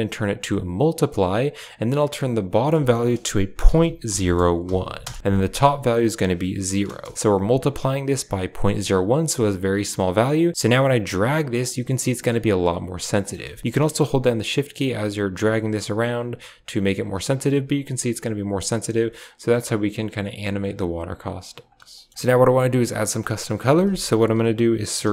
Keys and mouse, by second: 2.4-4.9 drag, 5.9 click, 9.5-11.4 drag, 12.4 shift+click, 14.0-17.0 shift+drag, 17.2-20.6 drag, 21.0 click, 21.7 a, 21.8 click, 22.1 click, 22.4 g, 23.1 click, 23.5 shift+a.